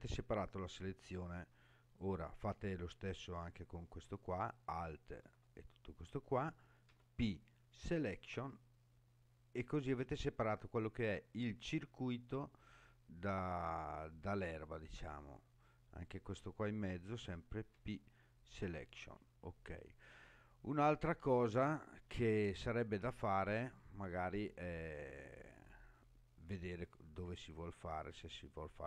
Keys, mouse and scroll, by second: 2.0 click, 4.5 alt+click, 6.9 p, 15.9 click, 17.7 p, 19.7-20.8 scroll up 2, 21.2 click.